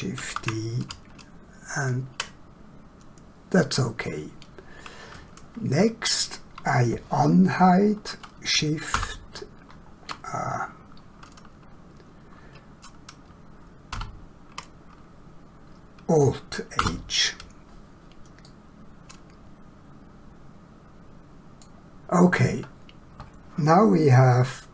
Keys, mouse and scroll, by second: 0.3 shift+d, 1.8 ctrl+click, 3.5 middle click, 8.9 shift+h, 13.9 ctrl+z, 16.8 alt+h, 18.5 middle click.